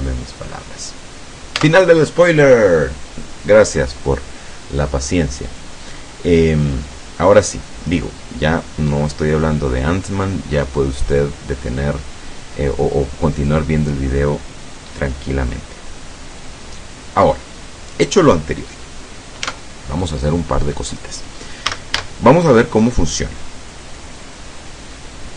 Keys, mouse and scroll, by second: 0.0 click, 1.7 Tab, 19.5 Tab, 20.3 scroll down 2, 20.9-21.3 scroll up 2, 21.4 scroll down 2, 21.7 a, 22.9-25.3 drag.